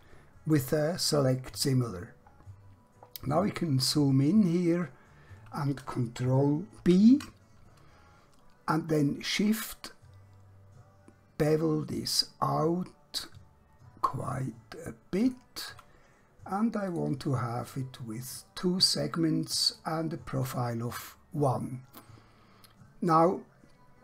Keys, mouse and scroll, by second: 2.5 scroll up 1, 3.0 scroll down 1, 4.8-5.9 scroll up 1, 6.8 ctrl+b, 15.3 shift+click, 16.9 click, 19.8 click, 22.3-22.7 scroll down 1, 23.2 scroll up 1.